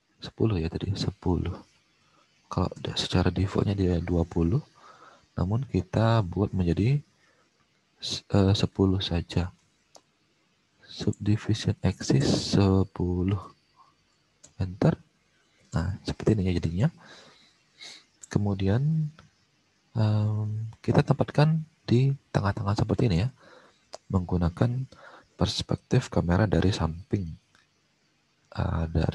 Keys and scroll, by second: 0.3 alt+Tab, 1.5-1.9 typing, 2.6 Return, 12.1 BackSpace, 12.2 BackSpace, 13.1 1, 13.8 0, 14.4 Return, 18.3 alt+Tab, 23.1 alt+Tab, 24.8 space.